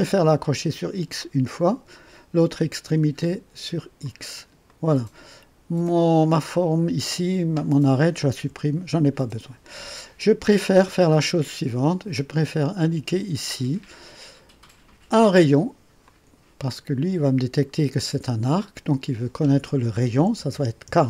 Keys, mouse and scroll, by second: 1.2 click, 4.0 click, 4.7 right click, 6.2 click, 8.3 Delete, 12.8 click, 16.0 click, 20.2 KP_4, 20.5 KP_0.